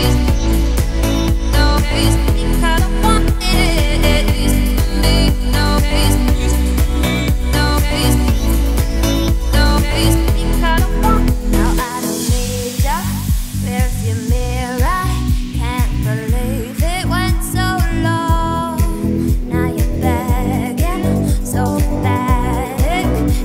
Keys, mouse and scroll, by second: 0.4 a, 0.9 z, 1.5 s, 2.2 z, 2.5 scroll down 4, 2.7 middle click, 3.3-3.8 scroll up 2, 3.8 middle click, 4.4 s, 5.7 Tab, 6.0 click, 6.6 click, 7.0 Tab, 7.8 2, 8.0 3, 8.3 click, 8.7 shift+s, 9.0 Tab, 10.2 shift+a, 11.2-11.8 scroll up 3, 11.8 shift+middle click, 12.2 r, 14.4 scroll up 2, 14.9 shift+middle click, 15.4 s, 16.7 1, 17.2 click, 17.7 g, 19.2 click, 20.0 g, 21.7 click, 23.0 ctrl+b.